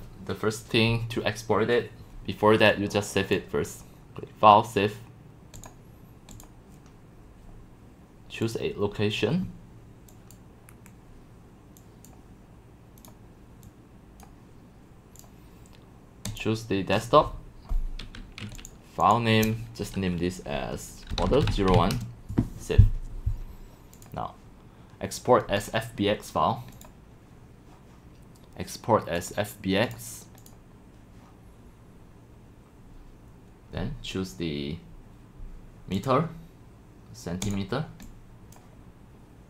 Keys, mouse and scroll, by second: 2.7 click, 5.6 click, 6.3 click, 8.5 click, 10.3 click, 10.7 Delete, 12.0-12.4 drag, 13.0 click, 16.2 click, 18.5 click, 20.9-22.4 typing, 24.0 click, 25.6-25.9 drag, 26.7 click, 27.2 middle click, 29.2 click, 29.6 middle click, 29.8 click, 30.5 click, 36.0 click, 37.4 click, 38.3-38.9 drag.